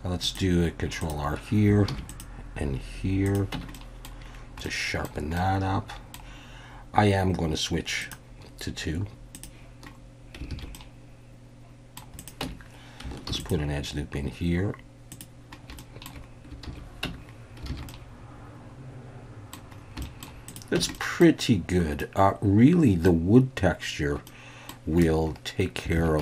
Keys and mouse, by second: 1.0 click, 1.9 ctrl+r, 3.2 click, 3.5 Tab, 3.7-4.0 drag, 4.6-5.0 middle drag, 5.3-6.1 middle drag, 10.5 alt+a, 10.7-12.0 middle drag, 12.2 click, 12.4 Tab, 13.3 ctrl+r, 15.1 click, 15.8 shift+drag, 16.7 alt+a, 17.0 Tab, 17.7 alt+a, 17.9-19.5 drag, 20.0 shift+middle drag, 20.5 drag, 20.9 Tab, 20.9 middle click, 22.0-23.1 middle drag, 24.3 middle click, 25.0 Tab, 25.9 alt+a.